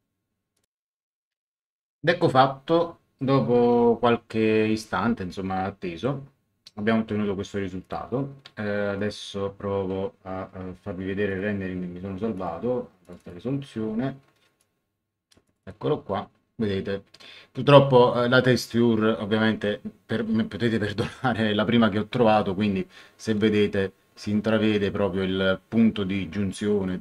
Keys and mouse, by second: 0.5 click, 7.8 click, 9.1 click, 11.2 click, 12.3 click, 14.6 click.